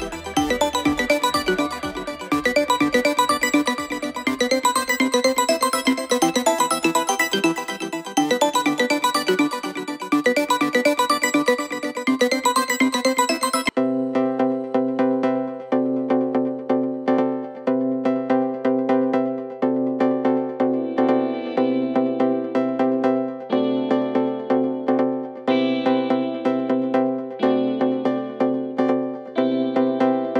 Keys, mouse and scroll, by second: 0.3-1.0 scroll up 3, 1.0 s, 3.2 middle click, 3.5-3.8 scroll down 1, 3.8 middle drag, 4.1 scroll down 3, 4.4 g, 6.5 KP_7, 8.0-8.6 drag, 9.2 g, 10.8 click, 11.8 ctrl+shift+b, 12.9-13.3 drag, 13.3 middle click, 13.7 shift+a, 14.3 ctrl+a, 15.3-16.5 drag, 16.5 KP_7, 17.3 ctrl+shift+b, 21.7 middle click, 22.0 a, 22.5 e, 23.6 middle click, 24.0 a, 24.6-25.0 drag, 25.0-26.6 middle drag, 26.9 middle click, 27.6-28.0 scroll up 5, 28.0 middle drag, 28.3-28.8 scroll down 2, 28.8 g, 30.3 middle drag.